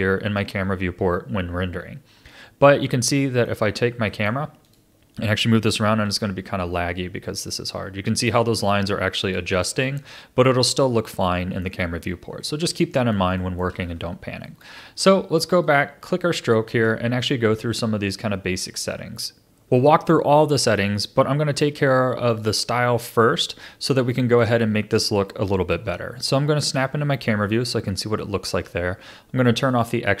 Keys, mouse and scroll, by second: 0.0-3.6 shift+middle drag, 3.6-4.1 scroll down 3, 4.1-4.6 middle drag, 4.6 click, 5.9 g, 11.1-12.1 middle drag, 12.1-12.7 scroll up 4, 12.7-13.8 middle drag, 13.8-14.4 scroll up 4, 14.4-15.6 middle drag, 15.6 click, 16.2-19.3 shift+middle drag, 22.3-24.1 drag, 24.1-26.6 middle drag, 26.6 KP_0, 27.6-28.2 scroll down 3, 28.2-30.2 shift+middle drag.